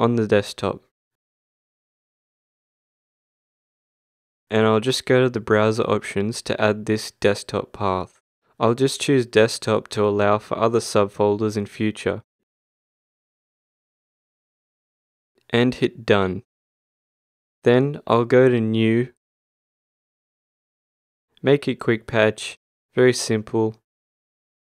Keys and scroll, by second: 0.0-1.3 typing, 1.4 Return.